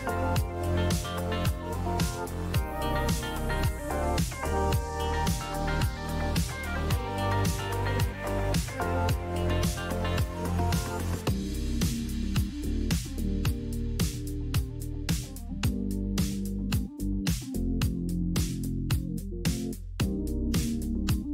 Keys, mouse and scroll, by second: 0.0-0.5 typing, 2.2 click, 2.3-3.0 typing, 3.8 click, 8.5 click, 11.7 click, 12.8 click, 13.2 click, 14.0 click, 14.7 click, 18.4 click.